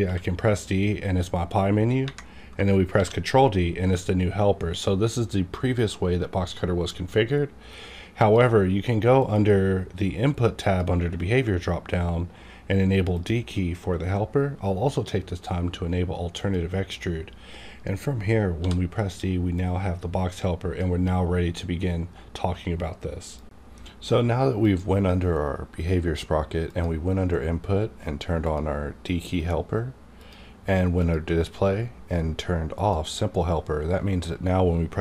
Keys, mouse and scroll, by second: 0.3 ctrl+d, 2.9 ctrl+d, 8.2 click, 8.2 d, 9.2 click, 13.2 click, 18.5 click, 18.5 d, 19.5-23.0 drag, 26.7 click.